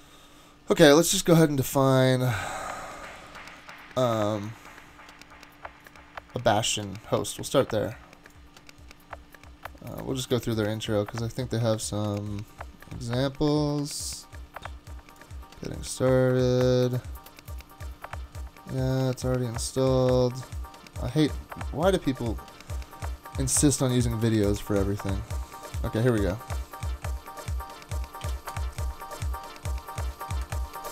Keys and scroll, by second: 28.2 super+c, 28.5 super+Tab, 30.4 super+Tab, 30.8 super+Tab.